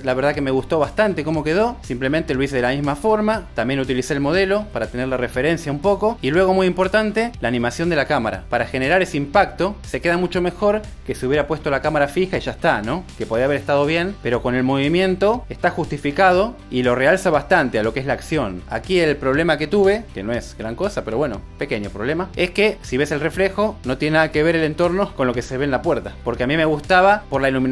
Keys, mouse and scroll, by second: 0.0-0.1 typing, 0.7 click, 1.4 click, 3.0 g, 3.4 click, 3.9 super+s, 4.1 click, 4.2 click, 5.1 super+click, 5.4 space, 5.5 click, 6.2 click, 6.7-19.1 typing, 7.4 click, 7.8 click, 9.1 click, 9.4 click, 10.5 click, 13.9 Right, 14.0 Left, 14.9 click, 15.0 Right, 15.3 click, 16.0 click, 17.5 click, 17.9 right click, 20.3 space, 21.9 click.